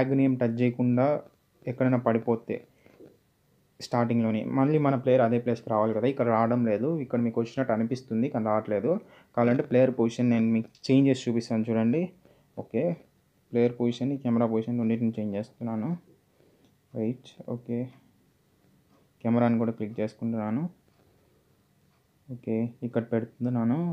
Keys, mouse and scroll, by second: 0.0-1.4 typing, 3.8-5.0 typing, 7.1 click, 8.5 scroll down 1, 8.8 middle click, 12.6 z, 13.9 click, 16.9 z, 19.1 ctrl+Num_Lock, 19.3 ctrl+click.